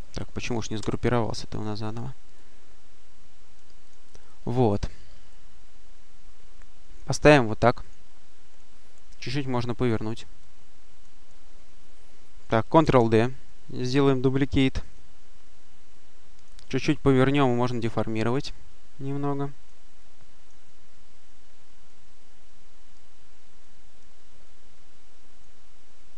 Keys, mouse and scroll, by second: 0.6 ctrl+g, 2.2-4.3 drag, 5.2-7.3 drag, 7.7 click, 9.4 click, 10.3 click, 12.7 ctrl+d, 13.3 click, 14.8 click, 15.8-16.8 drag, 16.8 click, 18.1 click, 18.9-20.0 drag, 21.7-23.3 drag, 23.5 click, 26.0 click.